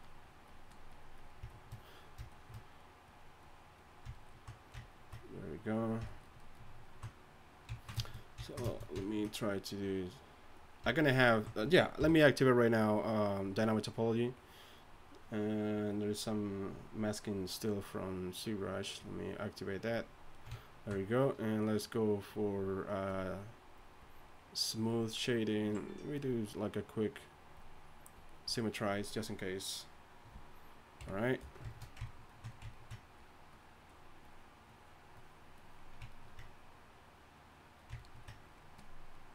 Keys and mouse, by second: 9.8-15.5 drag, 12.0 t, 31.0 KP_1, 34.1-38.1 middle drag, 39.1-39.3 drag.